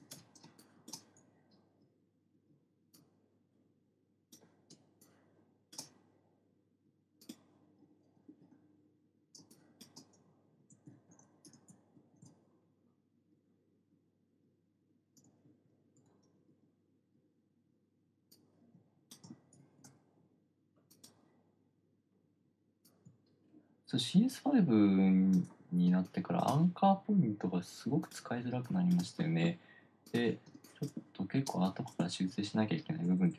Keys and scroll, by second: 0.5 super+z, 0.9 space, 5.1-6.6 typing, 8.7 super+z, 8.7 super+x, 9.7 space, 10.3 space, 11.3 shift+super+z, 12.3 shift+super+z, 15.9 alt+super+z, 19.9 super+z, 26.3-26.9 typing, 28.9 space, 30.9 space.